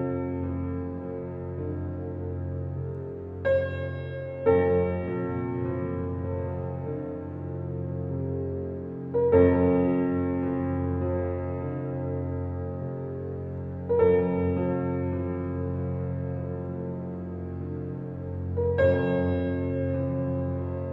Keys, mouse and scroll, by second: 0.8-1.2 ctrl+alt+scroll down 1, 1.7 ctrl+alt+scroll down 1, 5.4-7.4 ctrl+alt+scroll up 5, 7.4-8.6 ctrl+alt+scroll up 1, 8.8-10.2 alt+right drag, 10.2 click, 11.1 click, 11.6-14.0 alt+right drag, 14.0-20.9 drag.